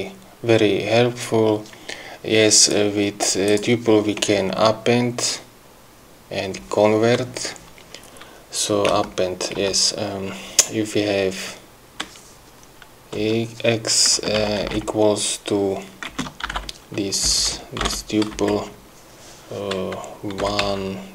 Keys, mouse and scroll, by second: 3.1 click, 9.3 Return, 10.0 Return, 13.6 x, 14.5 space, 14.8 =, 15.0 BackSpace, 16.5 space, 17.7 BackSpace, 18.7 shift+Left, 20.6-21.1 typing.